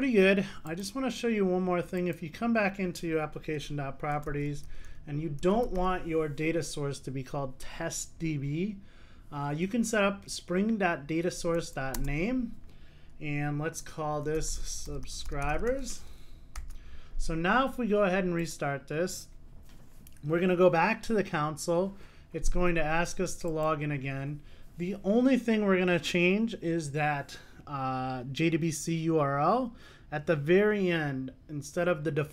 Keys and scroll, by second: 11.9 Return, 16.7 super+s, 24.2 ctrl+r.